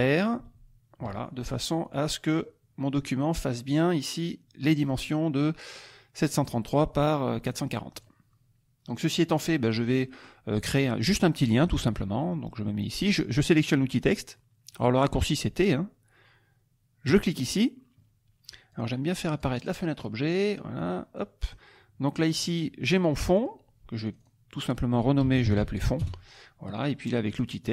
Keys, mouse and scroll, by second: 0.4 ctrl+shift+r, 1.9 click, 2.4 click, 3.7 click, 4.6 click, 6.1 click, 7.5 click, 7.9 click, 9.0 click, 9.6 click, 10.0 click, 10.1 middle click, 10.9 middle click, 11.8 t, 17.1 click, 18.7 click, 19.4 click, 20.8 click, 22.2-24.4 drag, 25.0-25.9 typing, 26.0 Return, 27.6 click.